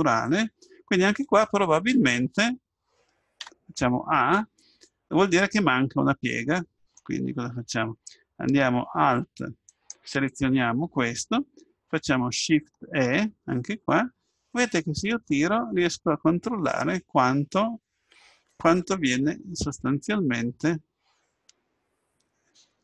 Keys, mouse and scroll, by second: 0.3 middle click, 1.1 Tab, 3.5 a, 5.9-7.9 middle drag, 9.8-11.6 right drag, 13.1 shift+e.